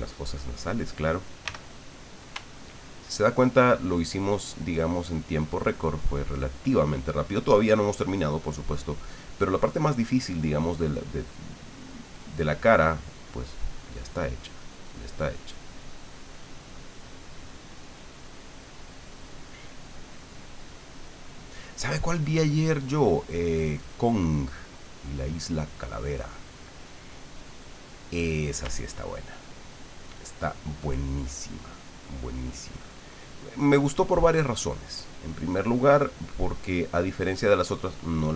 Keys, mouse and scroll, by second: 1.4 f, 2.0 click, 2.5-6.2 ctrl+drag, 15.7-24.2 ctrl+drag, 24.3-25.4 ctrl+middle drag, 25.5-28.2 drag, 29.1-37.8 ctrl+drag, 38.2 ctrl+middle click.